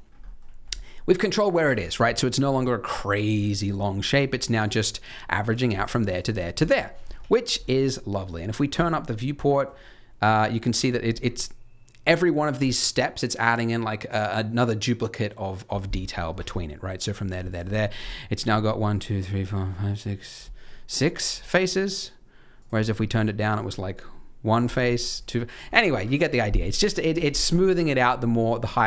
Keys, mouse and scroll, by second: 0.0 scroll down 2, 0.2 middle click, 2.0 scroll up 1, 2.2 middle click, 2.5 scroll down 2, 3.3-3.7 scroll down 4, 3.6-4.1 scroll up 6, 4.0 middle click, 4.5 Tab, 5.4 click, 5.7 shift+click, 6.1 click, 6.5 click, 7.1 Tab, 7.4 scroll up 2, 8.7 click, 9.3 middle click, 10.7 click, 15.9-16.3 scroll up 5, 16.3 Tab, 17.0 click, 17.4 shift+click, 17.9-19.2 scroll up 2, 20.4 middle click, 21.2 Tab, 22.5 click, 22.7 click, 23.1 Tab, 24.6 click, 25.1 click, 27.1 Tab, 27.2 scroll down 3, 27.5 shift+middle click, 27.9 middle click, 28.6 scroll down 2, 28.8 middle click.